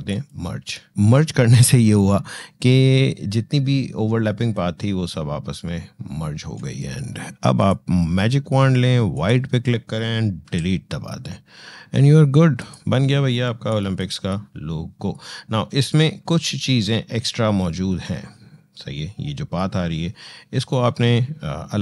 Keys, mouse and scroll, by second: 7.4 click, 10.2 Delete, 12.4 click.